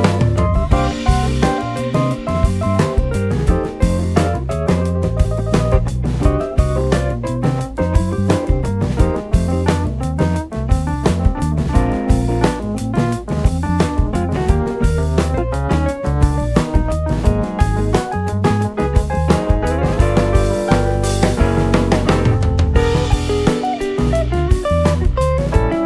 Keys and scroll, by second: 2.0 y, 2.3 Return.